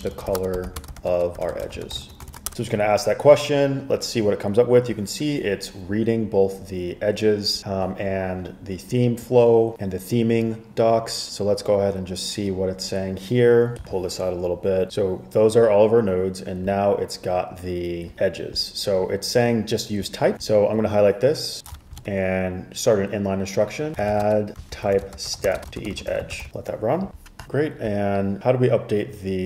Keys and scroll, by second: 0.0-2.9 typing, 23.8-26.9 typing.